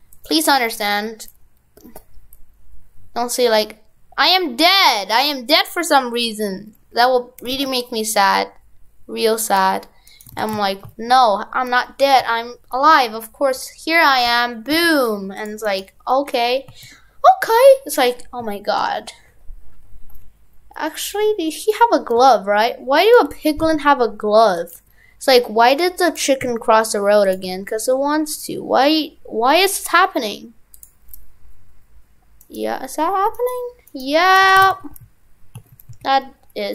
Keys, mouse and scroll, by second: 10.1 right click, 10.3 right click, 10.4 shift+f, 15.7 right click, 30.8 click, 32.4-33.8 right click, 34.4 shift+f.